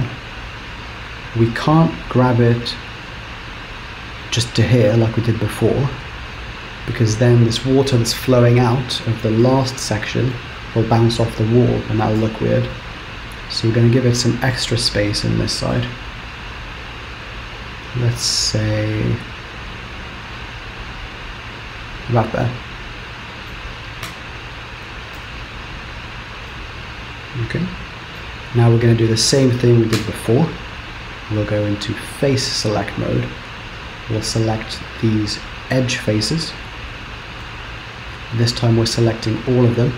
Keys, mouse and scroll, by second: 1.1 g, 6.8-7.2 scroll up 2, 7.2 middle click, 8.3-8.8 scroll down 3, 8.8 middle click, 9.7 middle click, 12.2 KP_7, 12.8 scroll up 2, 13.6 shift+middle click, 15.2 g, 22.5 middle click, 24.2 Tab, 25.3 z, 26.6 middle click, 30.1 Tab, 32.2 click, 32.2-33.0 scroll down 1, 34.9 click, 36.3 click, 37.7 shift+click, 38.5 click, 39.8 shift+click.